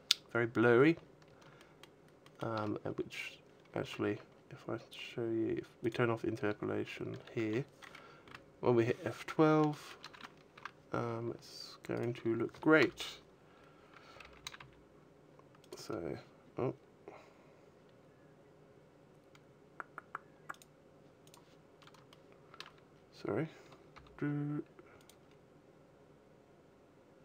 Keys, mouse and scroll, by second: 0.8-1.1 scroll down 5, 1.3 shift+middle click, 2.0 shift+middle click, 3.3-4.4 scroll down 12, 5.8 click, 10.3 Escape, 10.3 shift+middle click, 10.3-10.7 scroll up 5, 10.8-11.5 scroll down 10, 11.5 right click, 12.4 KP_0, 14.2 g, 15.3 click, 21.9 shift+middle click, 22.7 scroll down 5, 23.3-23.7 scroll down 1, 23.7 g, 24.8 click, 25.0-25.6 scroll up 3, 25.6 scroll up 1.